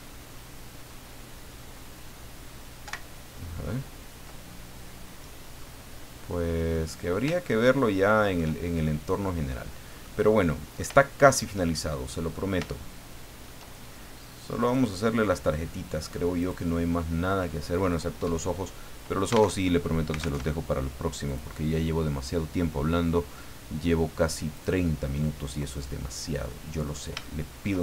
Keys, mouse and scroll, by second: 2.8 ctrl+Right, 5.6-6.8 drag, 7.4-8.5 shift+drag, 8.9 scroll down 2, 10.0 click, 11.0 shift+middle click, 11.7 shift+middle click, 12.7 shift+middle click, 14.6 click, 16.4 click, 19.6 alt+Tab, 20.4 alt+Tab, 21.2 click, 24.6 click, 25.7-26.0 scroll up 2, 26.5 middle click, 27.2 shift+middle click.